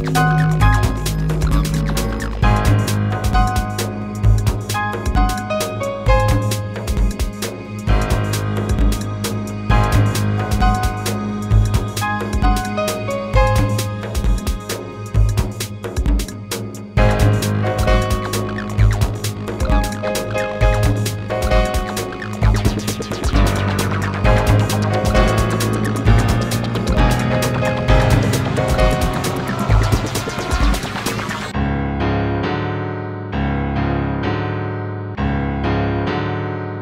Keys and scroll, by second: 5.1 BackSpace, 10.7 BackSpace, 15.4 BackSpace, 36.5 space.